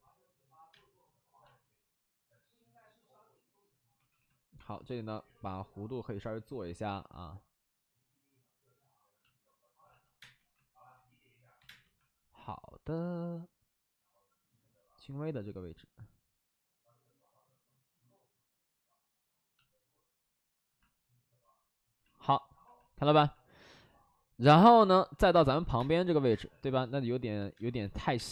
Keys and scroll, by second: 0.6 space, 3.9 2, 4.1 2, 10.1 space, 10.3 2, 11.5 2, 11.6 space, 11.7 2, 25.2 3, 25.3 space, 25.7 space, 26.2 space, 27.5 space, 27.8 alt+s, 28.1 space.